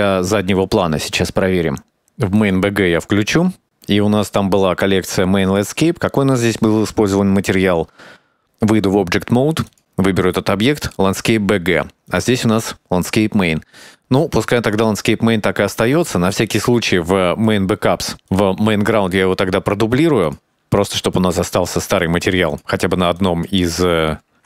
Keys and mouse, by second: 3.4 click, 4.4 click, 5.7 drag, 6.3 click, 8.4-9.2 drag, 9.9 click, 12.4 click, 17.7 click, 18.9 click, 20.5-20.9 drag, 22.1-24.4 drag.